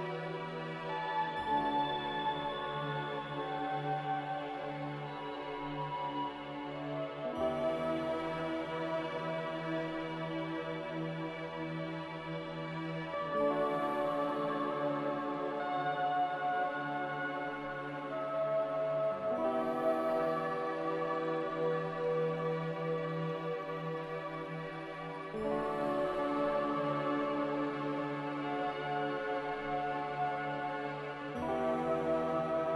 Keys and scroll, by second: 6.3 z, 15.0-17.1 typing, 19.9 a, 22.1 z, 23.4 x, 25.5-28.7 typing, 31.1 typing.